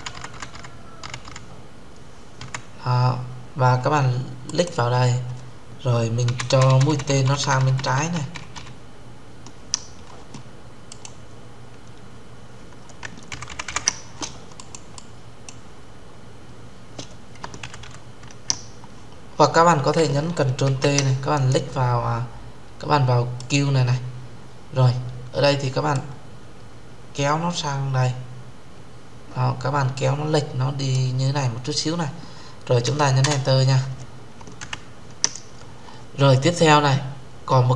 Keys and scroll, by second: 20.4 ctrl+t, 32.9 Return.